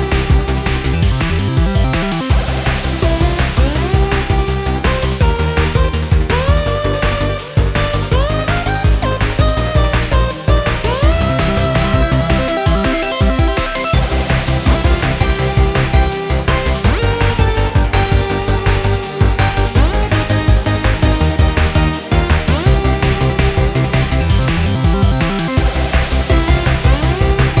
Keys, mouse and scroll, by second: 3.1 g, 4.7 click, 5.7 scroll up 1, 6.0-6.4 scroll down 3, 6.4-7.5 scroll up 1, 7.5 ctrl+s, 7.8 ctrl+s, 13.0 click, 14.6 click, 15.3-18.4 drag, 20.6-21.1 scroll up 4, 21.1 scroll down 1, 21.2 middle click, 22.2-25.2 middle drag, 26.1-27.6 drag.